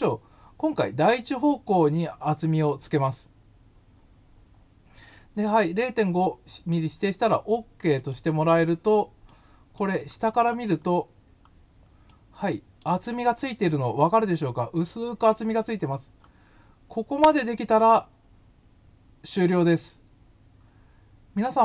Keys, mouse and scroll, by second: 7.9 click, 9.2 middle click, 10.0-10.3 scroll up 5, 10.3-10.7 scroll down 5, 10.7 scroll, 11.2 scroll, 11.5 scroll, 12.0 middle click, 15.8-16.2 scroll up 2, 17.7 click.